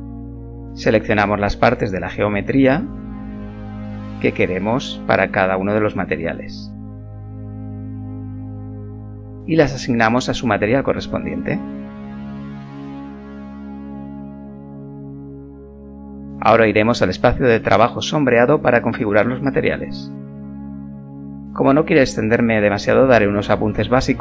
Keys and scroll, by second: 9.2 Tab, 11.8 ., 14.5 Tab.